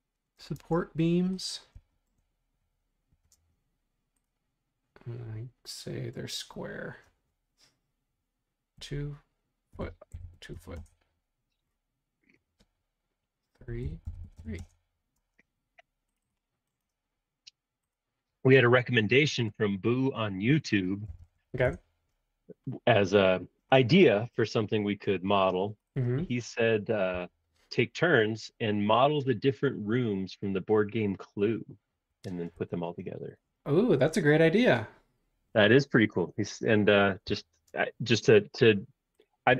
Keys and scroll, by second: 0.5 super+Tab, 3.2 r, 8.7-11.0 typing, 13.3-15.1 typing, 20.2-22.0 typing, 27.1 l, 31.4 Escape, 32.1 Escape, 32.3 space, 32.5 Escape, 37.3 l.